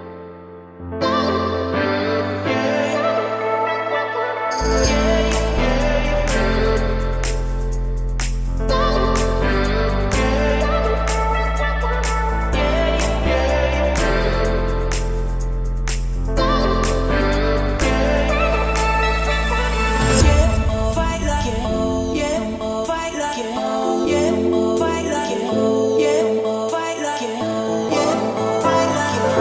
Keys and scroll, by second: 3.0 Escape, 9.3 Escape, 10.9 o, 13.1-13.9 typing, 15.4-17.8 typing, 18.6 Escape, 20.3 Escape.